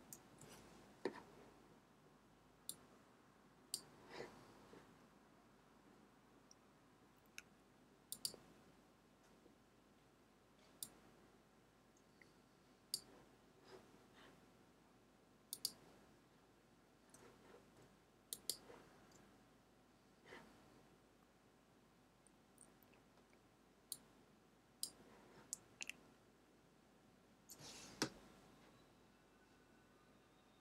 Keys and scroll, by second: 0.0-0.2 typing.